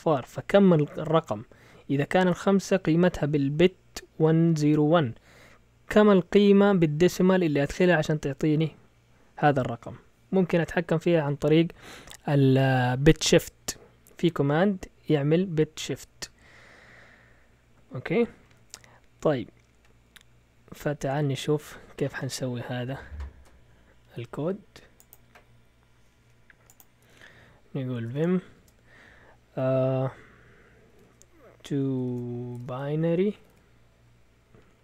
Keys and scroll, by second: 27.8-28.6 typing, 30.7-34.8 typing.